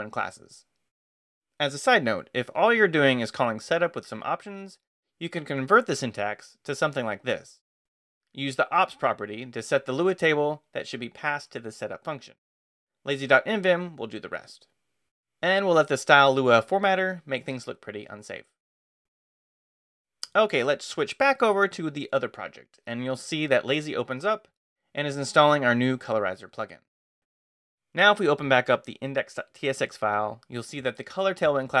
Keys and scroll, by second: 1.6 j, 4.6-12.0 typing, 9.4 Escape, 12.3 Escape, 15.0 Escape, 15.2-16.0 typing, 17.7 Escape, 17.9-19.2 typing, 22.6 Return, 27.5 q, 28.0 space, 28.1 f, 29.2-30.1 typing.